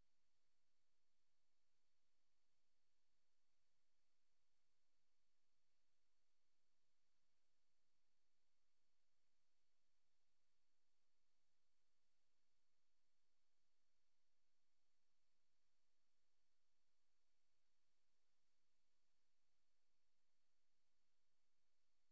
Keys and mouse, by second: 0.7 Right, 1.7 click, 2.4 click, 3.4 ctrl+z, 4.2 click, 5.0 click, 5.9 ctrl+z, 6.9 click, 7.7 click, 9.6 click, 10.2 click, 12.0 click, 12.7 click, 14.4 click, 15.4 click, 16.6 click, 17.4 click, 19.0 Left, 19.4 Left, 19.6 Left, 19.7 Left.